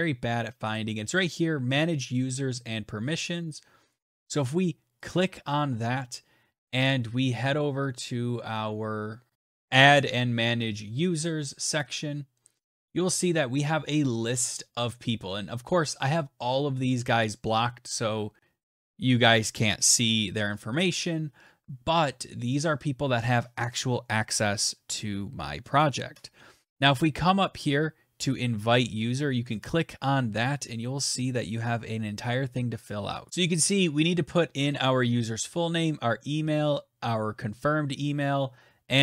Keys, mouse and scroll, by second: 4.9 right click, 5.3 middle click, 5.5-9.3 right drag, 11.5 right click, 11.9 click, 31.0 click, 33.3 click.